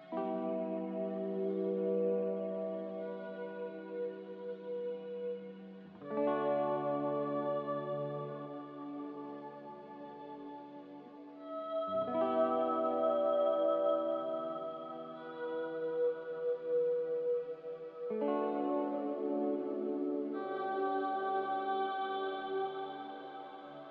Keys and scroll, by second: 5.1 n, 8.3 z, 10.2 n.